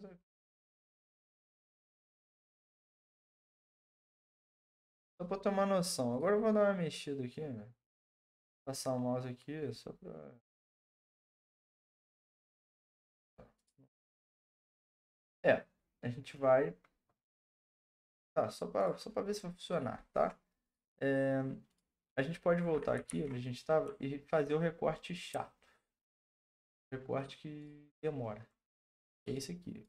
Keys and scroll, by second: 4.6 Return, 23.0 ctrl+d.